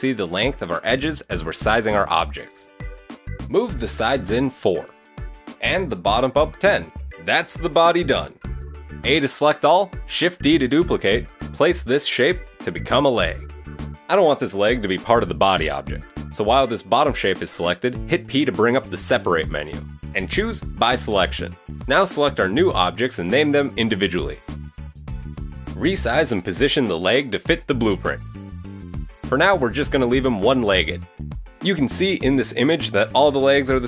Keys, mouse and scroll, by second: 1.1-1.5 scroll up 1, 1.5 middle click, 2.1 middle click, 2.4 middle click, 2.6-5.8 typing, 2.8 shift+middle click, 4.9 shift+middle click, 7.0 shift+middle click, 7.8 KP_3, 8.8 a, 9.5 shift+middle click, 10.8 shift+d, 18.5 p, 20.5-21.0 scroll down 1, 21.1 Tab, 21.3 right click, 21.6 click, 22.0 click, 23.0 click, 23.1 click, 23.5 click, 24.3 middle click, 24.7 KP_1, 24.9 scroll up 2, 25.0 Tab, 25.2 shift+middle click, 25.3 a, 25.5 a, 25.5 c, 27.5-28.6 typing, 28.3 Escape, 30.1 middle click, 30.1 scroll down 2, 31.1 q, 31.9 a, 32.7 KP_3, 33.3-33.8 scroll up 1.